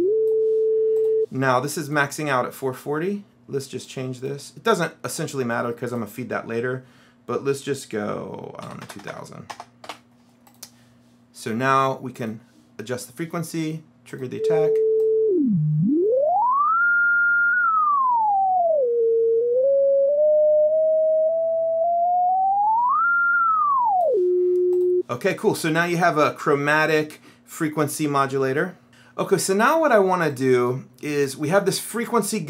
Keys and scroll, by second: 8.8 KP_2, 9.0 KP_0, 10.0 Return, 28.8 Delete.